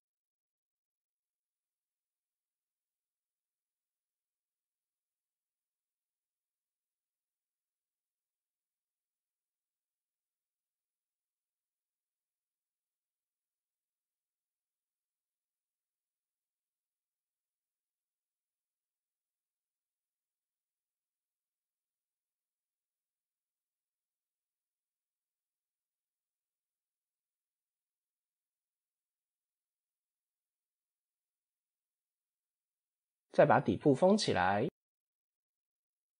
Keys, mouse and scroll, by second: 0.4 ctrl+r, 2.3 ctrl+r, 3.8 ctrl+r, 6.0 middle click, 6.7 ctrl+r, 7.7 middle click, 8.2 ctrl+r, 10.0 middle click, 10.3 scroll down 1, 10.8 KP_7, 12.3 scroll up 1, 14.5 click, 15.2 click, 18.3 click, 20.9 ctrl+z, 21.1 ctrl+z, 22.2 ctrl+r, 25.7 ctrl+r, 27.1 ctrl+r, 29.5 ctrl+r, 33.4 scroll down 1, 34.2 click, 34.5 Tab, 35.0 KP_1, 35.9 Tab.